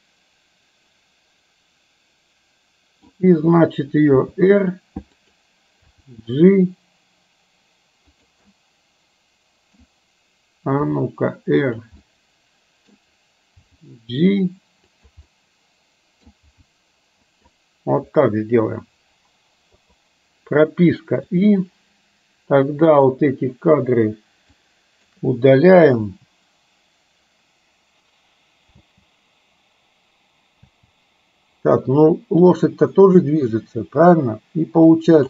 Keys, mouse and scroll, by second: 4.1 r, 5.9 g, 8.5 scroll up 1, 8.6-9.9 middle drag, 10.9 r, 12.0-12.9 middle drag, 13.8 g, 15.4 middle click, 16.5 g, 19.8 i, 22.9 click, 24.6-25.1 shift+drag, 26.1 Delete, 28.8 space, 30.6 space, 33.0 middle click, 35.0 click.